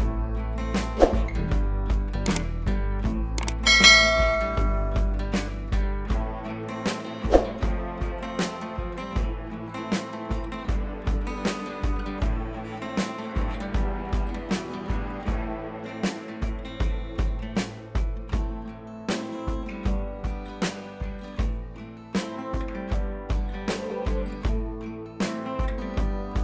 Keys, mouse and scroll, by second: 4.2 click, 5.6 b, 7.0 click, 8.2 [, 8.3 scroll down 1, 8.5 [, 8.7 scroll up 1, 8.8 [, 8.9 [, 9.6 click, 10.4 click, 10.7 ], 10.9 click, 12.1 scroll up 1, 12.2 [, 12.4 [, 12.5 scroll down 1, 12.6 [, 12.8 click, 16.0 ], 16.1 ], 16.2 ], 16.3 ], 16.4 click, 21.6 click, 21.7 click, 24.7 click.